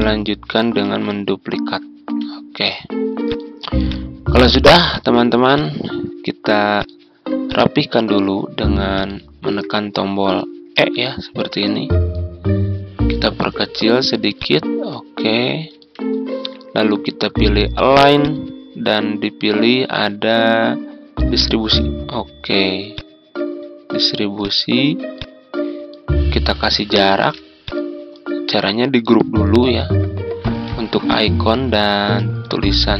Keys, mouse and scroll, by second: 0.7 ctrl+d, 1.2 click, 3.2 shift+click, 3.8 shift+click, 4.9 shift+click, 5.5 shift+click, 6.7 shift+click, 7.4 shift+click, 8.9 shift+click, 10.7 e, 12.1-13.9 drag, 14.9 ctrl+click, 18.2-24.3 drag, 27.0 ctrl+g, 27.6 click, 30.3 ctrl+g, 31.0 click, 32.3 ctrl+g.